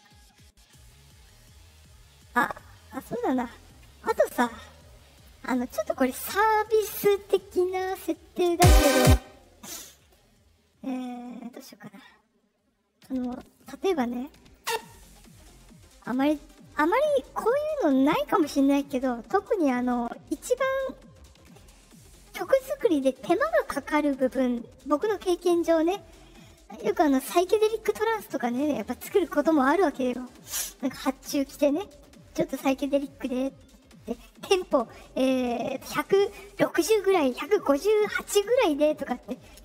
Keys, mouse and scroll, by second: 2.4 right click, 3.9 middle click, 4.5 click, 8.4 space, 8.9 space, 12.9 right click, 14.0 click, 14.1 click, 14.5 click, 15.2 right click, 16.5 middle click.